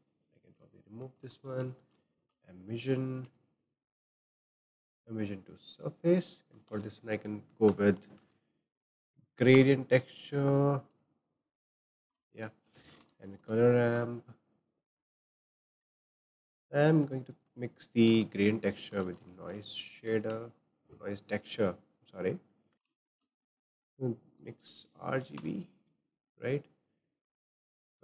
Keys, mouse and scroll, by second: 0.4 click, 0.6 Delete, 1.2 shift+a, 2.4 m, 3.2 m, 5.2 click, 6.2 click, 6.8 shift+a, 12.2 shift+a, 16.7 click, 17.3 click, 18.1 shift+a, 18.3-20.3 drag, 20.3 shift+a, 22.4 click, 22.7 Delete, 25.4 shift+a, 27.5-28.0 drag.